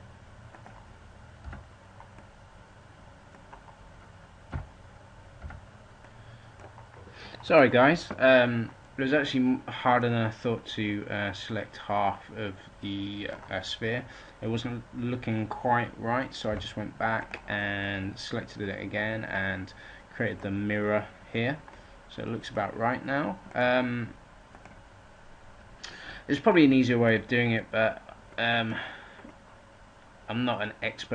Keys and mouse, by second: 1.3 a, 4.4 z, 5.3 a, 16.3 g, 20.5-22.5 right drag, 23.6 7.